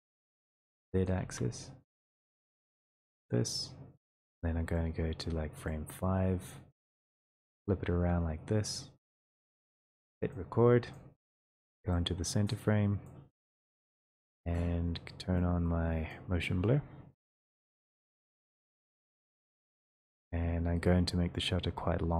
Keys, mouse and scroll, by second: 1.2 click, 1.3 ctrl+z, 3.5 click, 5.7 click, 6.1 middle click, 7.2 click, 7.2 middle click, 8.8 click, 13.0 click, 19.2 click.